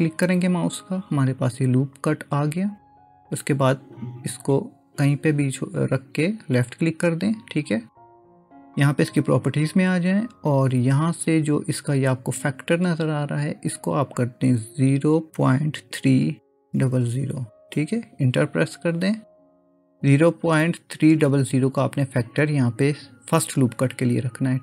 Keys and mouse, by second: 9.5 click, 13.5-19.8 drag, 16.9 KP_0.